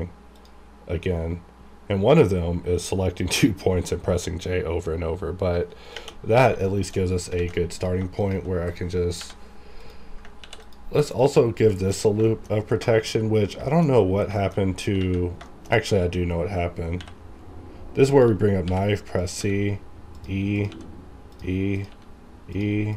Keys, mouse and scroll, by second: 2.5 click, 6.6 shift+middle click, 6.9 shift+scroll down 1, 7.0-7.3 scroll up 1, 7.3 alt+a, 7.7 click, 7.8 click, 8.2 shift+click, 9.2 j, 9.8 click, 10.4 ctrl+r, 10.6 ctrl+click, 11.4 scroll down 1, 11.7 shift+middle click, 12.2 shift+middle click, 12.5-12.8 scroll down 1, 12.8 shift+middle click, 13.1-13.4 shift+scroll down 2, 13.7 shift+middle click, 13.8 shift+scroll up 1, 14.3 shift+middle click, 14.4 shift+middle click, 14.4 shift+scroll down 1, 14.6-14.9 shift+scroll up 2, 15.0 alt+a, 15.4 shift+middle click, 15.7 shift+middle click, 17.0 k, 18.1 click, 18.6 c, 19.2 click, 19.4 e, 20.1 click, 20.7 e, 21.3 click, 21.9 e, 22.5 click.